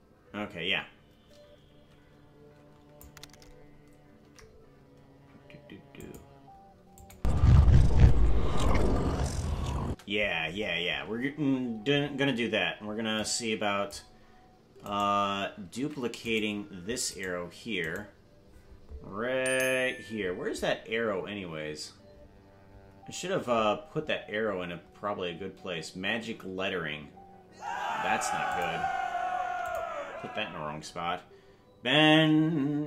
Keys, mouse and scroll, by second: 4.2 g, 7.0-10.2 drag, 7.1 space, 9.9 space, 13.2 click, 14.9 right click, 15.8 ctrl+Tab, 16.3 right click, 17.2 right click, 17.9 right click, 20.1-20.8 scroll down 10, 22.0-22.8 scroll up 11, 23.4-24.2 scroll up 9, 28.4 click, 29.6 ctrl+click.